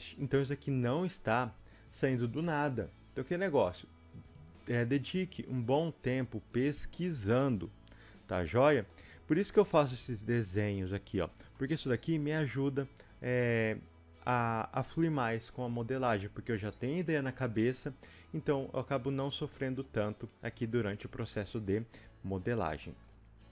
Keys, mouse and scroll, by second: 0.4 click, 4.3 g, 7.0 click, 7.3 g, 8.8 middle click, 9.5 click, 10.6 shift+click, 11.5-19.6 middle drag, 12.0 g, 18.2-18.5 scroll down 2, 19.8-20.5 scroll up 1, 20.6 middle click.